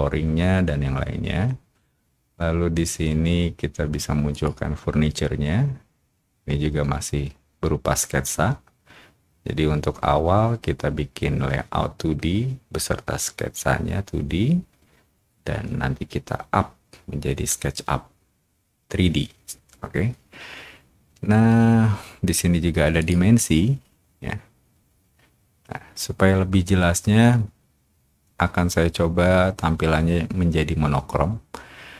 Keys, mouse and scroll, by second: 4.3 click, 23.0 click, 23.9-26.2 scroll up 2.